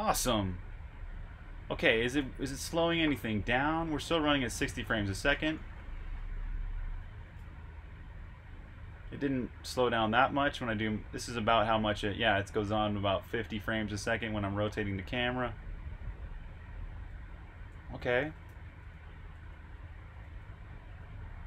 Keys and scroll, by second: 0.4 typing, 4.7 typing, 7.2 e, 8.8 e, 11.0-11.5 typing, 13.6-18.8 typing.